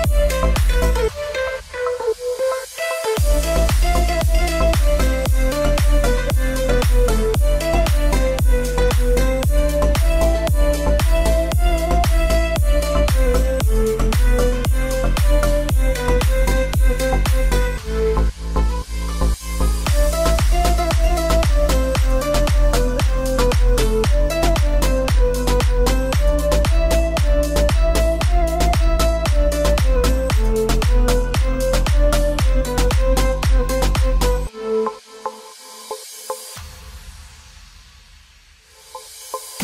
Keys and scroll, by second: 2.4 space, 7.7 alt+space, 11.8 ctrl+t, 18.8 Return, 21.0 Return, 21.9 ctrl+t, 34.6 Return.